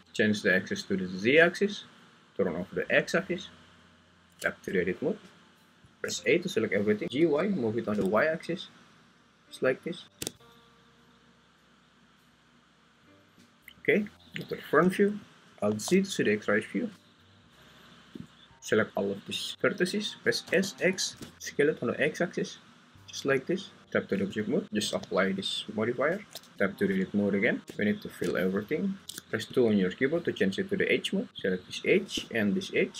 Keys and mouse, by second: 1.0-3.7 drag, 4.4 Tab, 6.0 a, 7.0 Escape, 7.0 y, 7.0 g, 7.4 y, 14.2 Tab, 14.2 `, 15.7 alt+z, 18.1 click, 18.3-19.5 drag, 20.4 s, 20.8 x, 23.8 Tab, 26.1 ctrl+a, 26.5 Tab, 26.5 `, 29.0 ctrl+z, 29.0 2, 29.5 2.